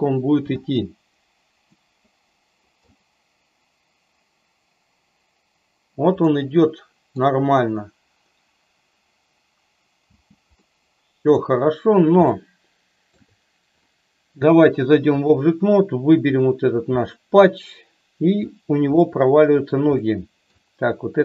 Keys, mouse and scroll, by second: 0.4 space, 1.7-2.8 middle drag, 6.1-7.1 middle drag, 10.0 space, 10.5-11.4 middle drag, 12.2-13.0 middle drag, 14.5-15.3 drag, 16.9-18.4 middle drag, 18.9-19.6 shift+middle drag, 19.9-20.4 middle drag.